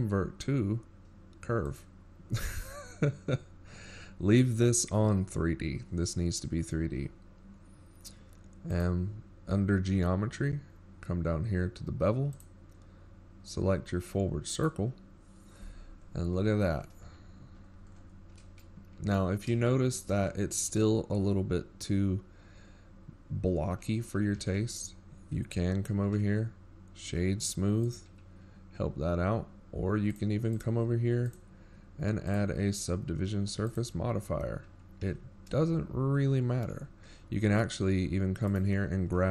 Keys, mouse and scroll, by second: 5.9 click, 14.2-16.4 scroll down 8, 16.4 click, 17.9-19.4 scroll down 5, 20.1 click, 23.6-24.8 scroll up 5, 24.9-25.3 shift+scroll up 1, 25.7-26.4 shift+scroll up 23, 26.4 middle click, 27.5-28.1 shift+scroll up 2, 28.1 shift+middle click, 28.8-29.5 scroll up 5, 38.1 click, 38.6 click.